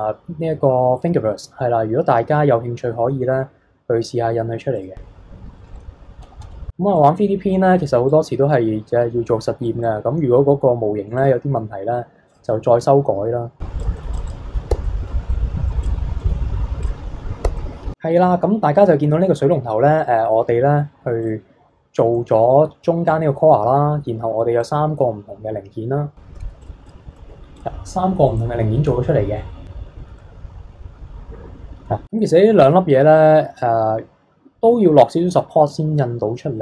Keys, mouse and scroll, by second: 4.7 click, 5.4-6.2 scroll down 10, 6.2-6.9 scroll up 11, 6.9-8.9 drag, 8.9-10.7 scroll down 17, 11.1 click, 14.0 middle click, 14.1 drag, 14.3 click, 14.7 h, 14.8-15.2 middle drag, 15.2 scroll down 3, 15.3-15.8 middle drag, 15.8 click, 16.2-16.8 middle drag, 16.8 click, 17.4 h, 17.6-19.4 middle drag, 19.4 scroll down 1, 19.7-21.2 middle drag, 21.2 click, 22.1-24.6 middle drag, 24.6 click, 26.4 alt+h, 26.6 drag, 26.9 click, 27.2-27.6 middle drag, 27.6 click, 28.2-31.7 middle drag, 32.0-35.1 scroll up 1.